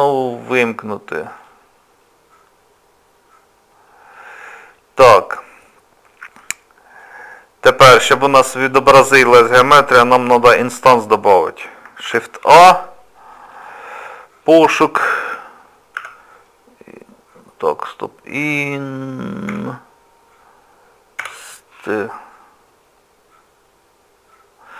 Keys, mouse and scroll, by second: 1.4 click, 5.7 scroll down 1, 7.0 click, 7.0 scroll down 3, 12.0 shift+a.